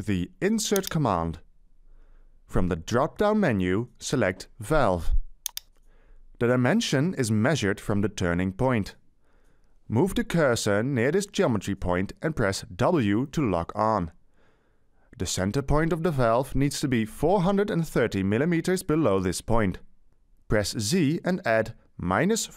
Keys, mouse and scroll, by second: 13.0 w, 19.9 Right, 21.6-22.5 typing.